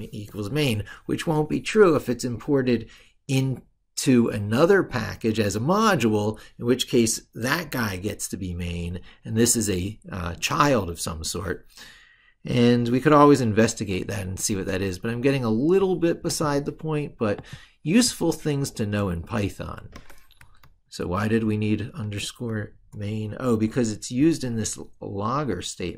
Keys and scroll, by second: 20.4 ctrl+super+Left.